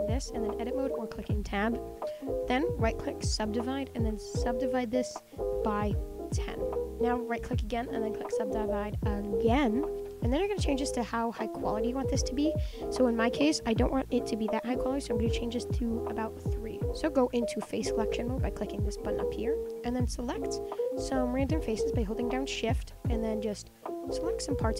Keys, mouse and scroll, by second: 1.0 Tab, 1.3 Tab, 1.5 Tab, 1.8 Tab, 2.2-2.7 scroll up 2, 2.7 middle click, 2.8-4.3 right drag, 4.3-7.0 drag, 7.3 right click, 9.9-10.4 scroll down 6, 10.4 middle click, 11.3-11.9 scroll down 5, 11.9-13.6 middle drag, 13.6-15.1 drag, 15.1-15.5 scroll up 9, 15.6 middle click, 16.2 scroll down 5, 16.3-18.8 middle drag, 19.0 click, 19.7 scroll down 2, 20.0 click, 20.3-22.2 middle drag, 22.2 shift+click, 23.8 shift+click, 24.5 shift+click.